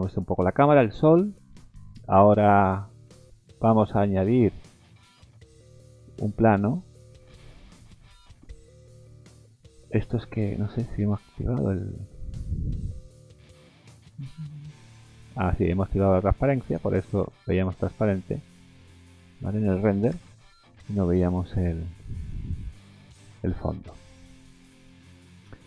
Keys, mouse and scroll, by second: 0.2 middle click, 0.7 middle click, 1.1-1.6 scroll up 3, 1.6 middle click, 2.2 shift+middle click, 2.5 shift+middle click, 2.7 middle click, 3.1 scroll up 2, 3.5 middle click, 4.2-4.6 scroll down 3, 6.5 click, 7.4-9.3 scroll down 10, 10.8 click, 12.4 click, 12.9-13.2 scroll down 4, 16.6 click, 17.2 click, 17.5 click, 18.0-18.6 scroll up 3, 19.2 scroll down 1, 20.1 KP_0, 20.8-21.6 scroll up 8, 23.5 middle click, 23.8 scroll down 4, 24.2 middle click, 25.1 middle click.